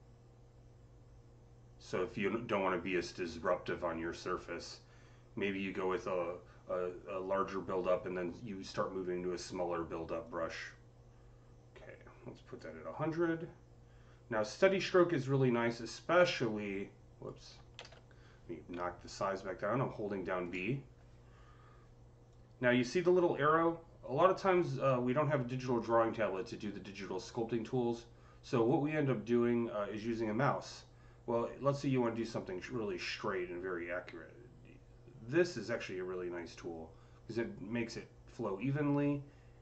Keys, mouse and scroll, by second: 10.1-14.8 drag, 10.1 c, 14.8-16.0 drag, 16.0-18.9 drag, 17.6 ctrl+z, 18.4-19.8 typing, 22.2-39.6 drag.